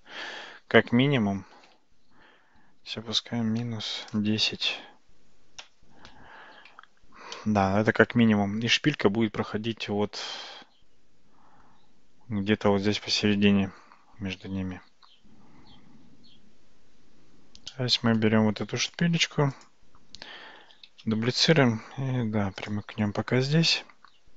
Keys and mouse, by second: 2.5 g, 6.8 Tab, 7.4-11.7 middle drag, 17.8 middle click, 18.9 click, 19.6 click, 21.0 shift+d, 24.1-24.3 middle drag.